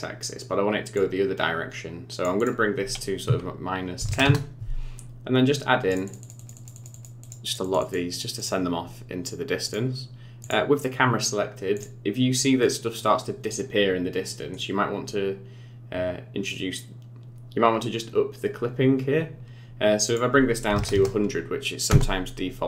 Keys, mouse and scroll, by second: 0.9 click, 2.4 click, 5.9-6.2 click, 6.0 click, 6.4 click, 6.5 click, 6.7 click, 6.9 click, 7.2 click, 7.4 click, 7.6 click, 7.8 click, 8.1 click, 8.4 click, 9.6 click, 10.4 click, 11.7 click, 12.6 middle click, 14.2 middle click, 20.0 click, 20.9 KP_0.